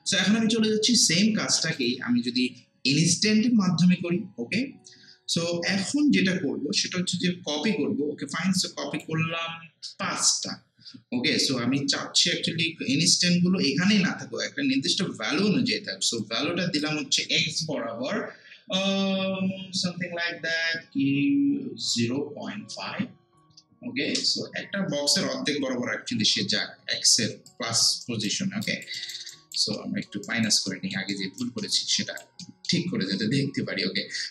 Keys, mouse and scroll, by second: 1.7 click, 8.5-10.0 drag, 10.0 5, 16.2-19.5 drag, 22.0 0, 25.0 Return, 27.3 alt+Return, 27.5 alt+click, 28.0 alt+right click, 28.7 alt+click, 29.0 alt+right click, 29.8 alt+middle click, 30.3 alt+right click, 30.7 alt+middle click, 31.1 alt+right click, 31.6 alt+middle click, 31.9 alt+right click, 32.4 alt+middle click.